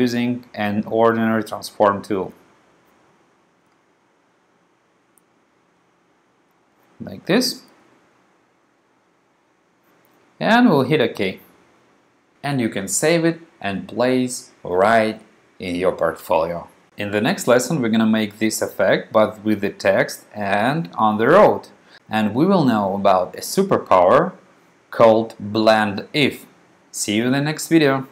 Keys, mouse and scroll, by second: 0.4 click, 1.4 click, 1.8 click, 3.8 click, 4.2 click, 4.6 click, 5.1 click, 5.6 click, 6.3 click, 6.6 click, 10.8 click.